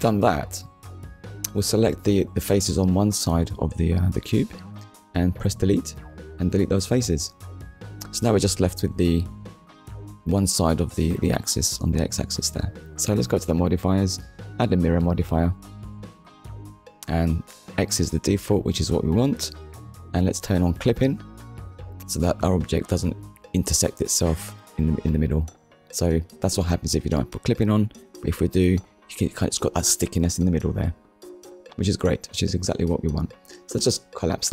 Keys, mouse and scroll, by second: 0.2 middle click, 0.9 shift+click, 1.2 middle click, 1.9 shift+click, 2.3 middle click, 4.5 Delete, 5.4 click, 5.9 middle click, 8.5 Tab, 9.1 shift+middle click, 10.3 KP_1, 13.2 click, 13.9 click, 16.5 click, 18.3 middle click, 22.1 Tab, 22.6 click, 26.0 right click, 27.2 click, 29.8 right click, 32.0 middle click.